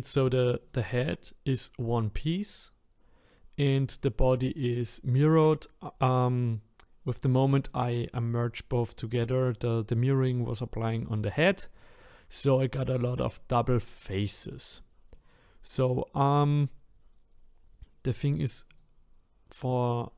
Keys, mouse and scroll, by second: 0.7 click, 3.9 click, 13.3-15.4 middle drag, 15.4-16.2 scroll up 5, 16.2-16.6 scroll down 2, 16.6-18.1 scroll up 3, 18.1 click, 18.8 click, 19.9-20.1 scroll down 1.